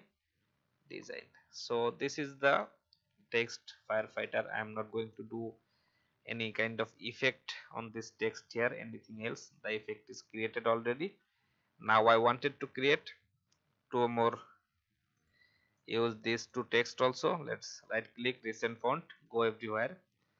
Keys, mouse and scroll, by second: 1.8-2.2 alt+scroll down 1, 2.8 alt+scroll down 1, 5.5 Down, 7.2 Up, 8.1 click, 10.8-11.3 alt+scroll down 1, 11.7-12.4 scroll down 2, 14.1 click, 15.1 shift+click, 15.7-16.7 drag, 17.0 right click, 20.0 alt+scroll up 1.